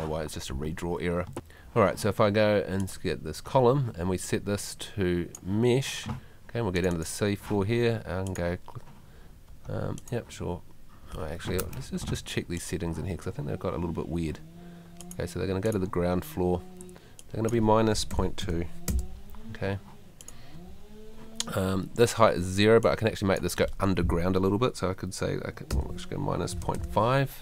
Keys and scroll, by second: 18.1 -, 18.4 ., 25.7 -.